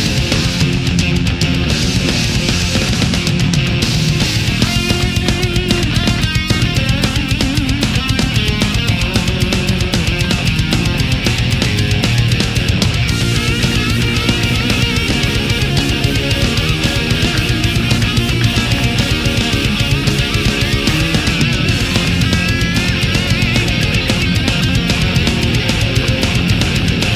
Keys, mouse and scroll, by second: 1.6-2.7 middle drag, 3.0 right click, 3.5 shift+right click, 3.7-4.4 shift+middle drag, 4.7 shift+right click, 5.6 shift+right click, 6.2 shift+right click, 6.7-8.0 shift+middle drag, 8.9 g, 10.6 click, 10.9-13.4 middle drag, 13.9 right click, 14.4 shift+right click, 14.7 shift+right click, 15.6 shift+right click, 15.9-16.7 shift+middle drag, 17.2 shift+right click, 18.0-19.1 middle drag, 19.5-21.5 drag, 21.5-22.6 middle drag, 23.9-25.7 middle drag, 25.7-27.1 middle drag.